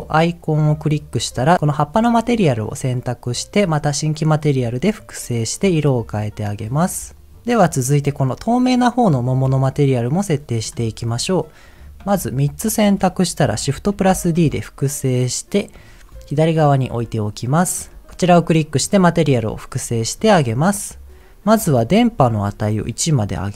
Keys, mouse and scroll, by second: 0.1-1.5 drag, 1.9 middle click, 4.4 click, 5.7 click, 10.5 click, 10.9 middle click, 11.7 click, 12.2 shift+click, 14.0 shift+d, 14.4 x, 15.7 click, 16.7 shift+middle click, 17.0-17.7 scroll up 2, 17.9 shift+middle click, 19.1 click, 22.4-23.4 drag.